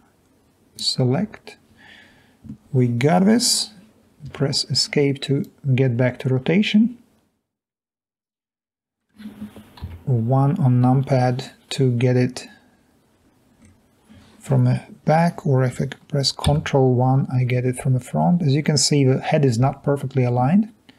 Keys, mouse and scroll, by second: 4.4 Escape, 9.9 1, 13.6-14.1 scroll down 4, 18.3-18.6 scroll up 2, 18.6-19.9 scroll down 2.